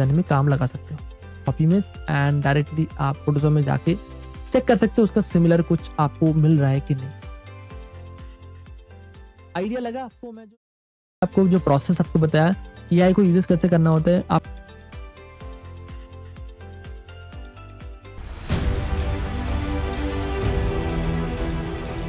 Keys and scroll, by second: 1.9 super+Tab, 4.8 super+v, 4.9 super+v, 5.7 space, 6.3 super+t, 9.2 space, 9.9 super+Tab.